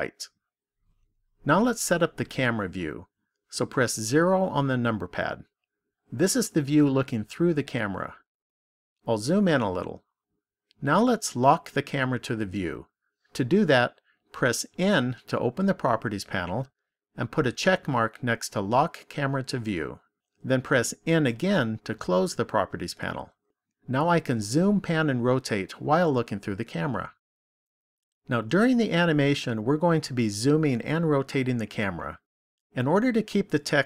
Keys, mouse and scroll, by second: 4.0 KP_0, 9.1 scroll up 1, 9.7 scroll up 1, 14.7 n, 17.5 click, 20.9 n.